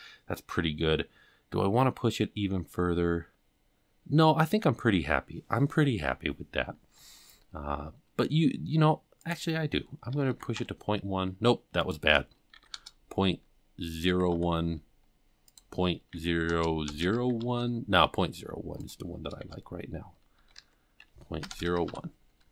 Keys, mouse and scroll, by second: 2.9-4.1 scroll up 5, 4.1-5.2 scroll down 4, 8.0 scroll down 2, 9.2-11.5 drag, 11.8-15.4 drag, 15.4-18.6 drag, 18.5 scroll up 1, 18.8-22.5 drag.